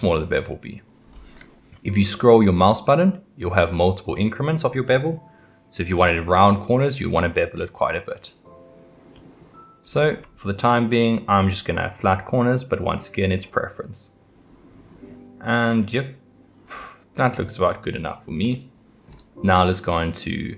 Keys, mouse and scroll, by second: 17.9 click, 18.4-20.5 middle drag.